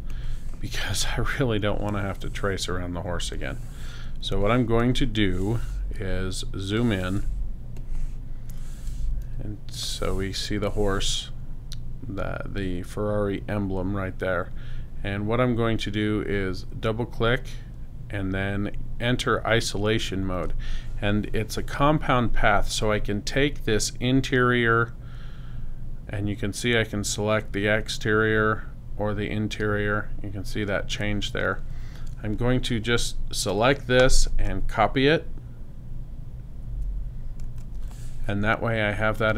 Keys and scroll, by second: 8.1 space, 9.2 super+-, 36.6 super+c.